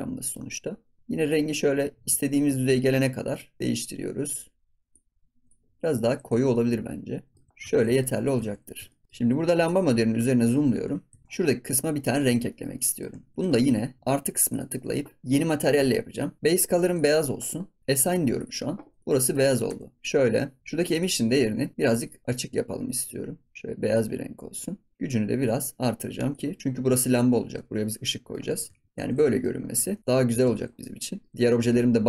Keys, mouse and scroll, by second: 0.2 middle click, 0.6-1.0 scroll up 4, 1.0 click, 6.0 scroll down 3, 6.3 ctrl+s, 6.5 middle click, 7.3 ctrl+s, 7.5 scroll up 4, 7.6 ctrl+s, 7.9 shift+middle click, 8.4 ctrl+s, 8.6-9.0 scroll up 4, 8.9 shift+middle click, 9.1-9.5 scroll down 8, 9.6 click, 9.9 scroll up 2, 10.1 click, 10.7 KP_Decimal, 11.2 scroll up 3, 11.6 click, 11.8-12.1 scroll up 4, 12.1-12.4 scroll down 1, 12.4 shift+middle click, 13.1 ctrl+s, 13.3-14.4 shift+middle drag, 14.4-16.4 drag, 16.4-16.9 scroll down 6, 16.9 click, 18.3 click, 18.8 scroll down 3, 19.0 middle click, 19.4 scroll up 1, 19.6 Tab, 20.0-20.5 scroll down 18, 20.8 click, 24.9-26.8 drag, 26.8 Tab, 27.1 scroll down 3, 27.3 ctrl+s, 28.0-28.5 middle drag, 28.5 click, 28.7 ctrl+s, 28.8 scroll down 1, 28.9 middle click, 28.9 ctrl+s, 29.2-29.5 shift+middle drag, 29.5 scroll up 4, 29.7 ctrl+s, 29.9-30.4 middle drag, 30.4 ctrl+s, 30.6 scroll down 4, 30.8-31.3 middle drag, 31.3 scroll up 2, 31.4 shift+middle drag, 31.6 ctrl+s.